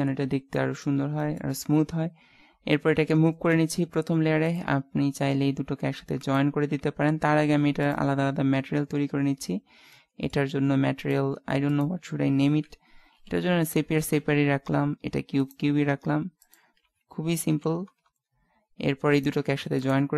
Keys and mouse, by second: 0.0-3.5 middle drag, 3.5 m, 10.0-11.0 middle drag, 11.0-12.3 drag, 15.4-18.3 right drag, 16.4 click, 19.2-20.1 right drag.